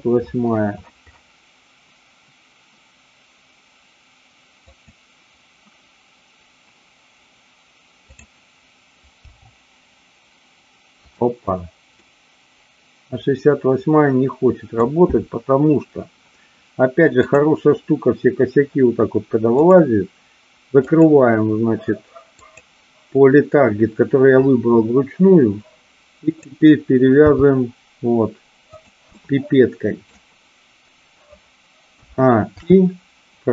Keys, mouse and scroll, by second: 8.0-9.0 drag, 9.3 g, 11.1 click, 12.0-14.7 middle drag, 17.1 click, 19.5 click, 21.0 click, 26.4 click, 27.4 g, 28.9 click, 29.1-30.1 middle drag, 32.5 i.